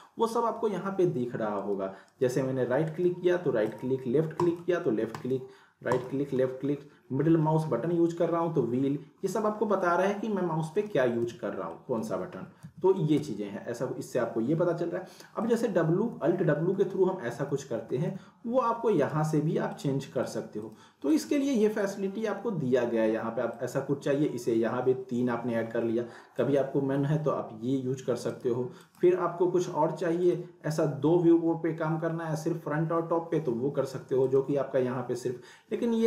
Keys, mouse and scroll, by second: 1.6 right click, 3.7 click, 5.1 right click, 5.9 click, 6.4 scroll down 1, 6.6 scroll, 6.7 scroll down 1, 6.9 scroll up 1, 7.0 scroll down 1, 7.2 scroll up 1, 7.3 scroll down 1, 7.6 scroll up 1, 7.7 scroll down 1, 7.9-8.3 scroll, 8.3 scroll down 1, 8.6 scroll up 1, 9.2 scroll up 1, 9.4 scroll down 1, 9.5 scroll up 1, 9.6 scroll down 1, 9.6 scroll up 1, 9.7 scroll down 1, 9.9-10.5 scroll up 1, 10.6-11.2 scroll down 2, 10.7 middle click, 11.2 z, 11.8 middle click, 12.3 scroll down 1, 12.6 z, 12.9 scroll down 1, 13.1 z, 15.5 click, 16.0 alt+w, 19.0 click, 19.7 click, 26.4 click, 28.3 right click, 28.8 click, 29.1 click, 34.2 click.